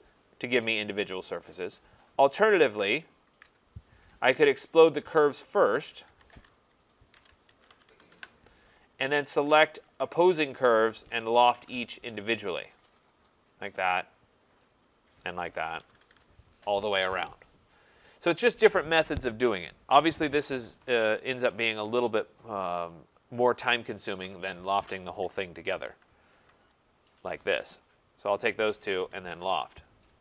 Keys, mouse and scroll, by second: 0.0 click, 0.6 click, 2.6 ctrl+z, 3.2 ctrl+z, 4.7 click, 5.6 shift+click, 6.5-8.4 typing, 9.0 click, 10.3 shift+click, 11.0-12.0 typing, 12.9 click, 13.8 click, 14.8 shift+click, 15.8-16.1 typing, 18.6 click, 18.6 typing, 19.7-20.5 typing, 25.3 click, 25.6 ctrl+z, 25.9 ctrl+z, 26.3 ctrl+z, 28.2 click, 28.8-30.0 typing.